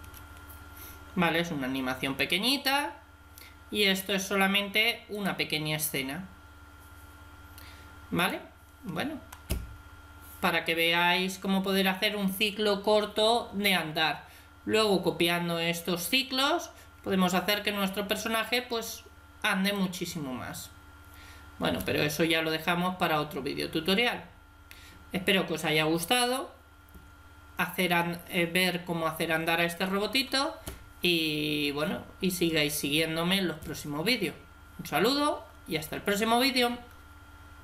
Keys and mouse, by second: 5.0-6.8 drag, 6.8 middle click, 8.1-9.7 drag, 11.2-19.7 middle drag.